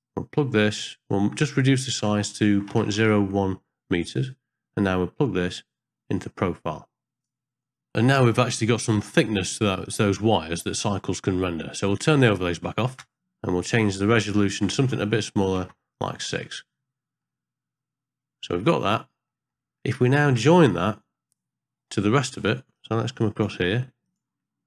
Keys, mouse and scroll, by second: 1.8-3.0 drag, 5.4 click, 5.6-7.2 drag, 8.3-9.4 middle drag, 10.9 click, 12.0-12.4 middle drag, 14.3-15.6 drag, 17.3-18.5 middle drag, 19.3 middle click, 19.3 scroll down 1, 20.4 middle click, 20.4-20.7 scroll down 1, 21.9 middle click, 22.2-22.7 scroll up 1, 22.7-23.4 drag, 24.0 click.